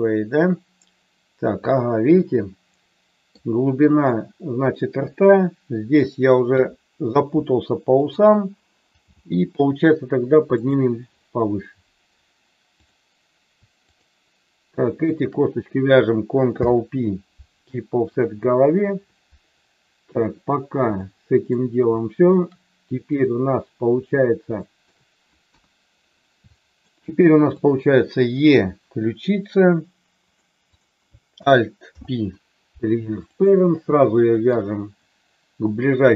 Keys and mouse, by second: 6.4 KP_3, 8.0 click, 8.9 g, 10.7 click, 13.8 shift+click, 15.0 shift+click, 16.5 ctrl+p, 20.9 shift+middle click, 21.9 shift+middle click, 24.7 shift+middle click, 25.4 KP_1, 26.5 middle click, 28.4 e, 30.2 click, 30.7 click, 31.9 alt+p.